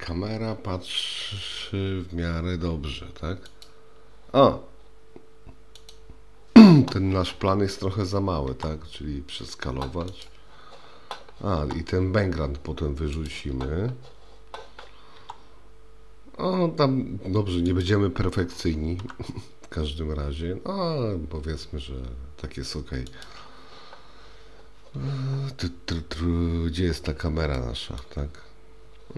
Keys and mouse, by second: 5.8 click, 8.5 s, 15.2 s, 19.0 g, 27.6 middle click, 27.7 click.